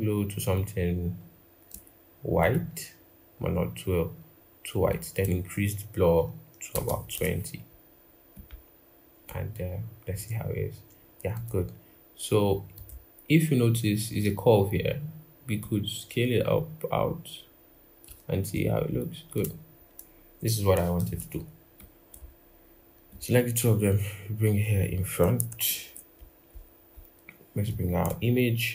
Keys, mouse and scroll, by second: 6.5 typing, 20.8 ctrl+-, 25.4 ctrl+=, 26.3-27.8 scroll.